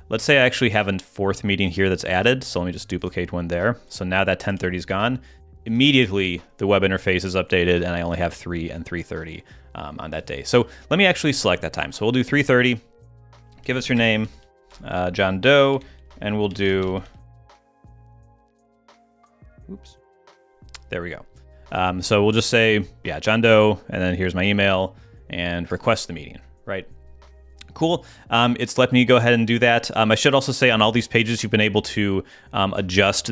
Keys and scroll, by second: 4.5 super+Tab, 14.7 Tab, 20.3 Tab.